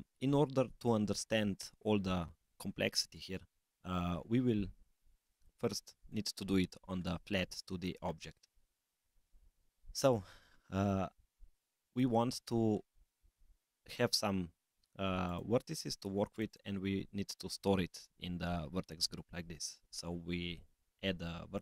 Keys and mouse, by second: 5.4 click, 6.0 click, 11.8 click, 15.2 click, 16.2 click, 16.5-21.6 drag.